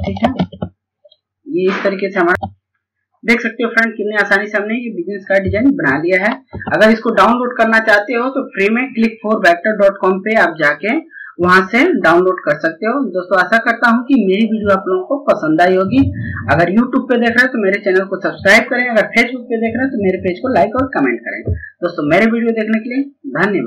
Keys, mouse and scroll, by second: 1.6 click, 6.0 Page_Up.